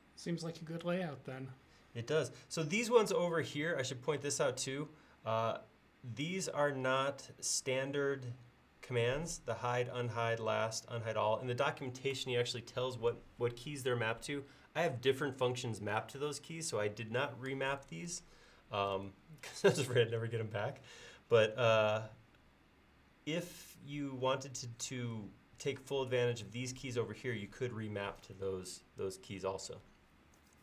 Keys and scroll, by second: 18.9 typing.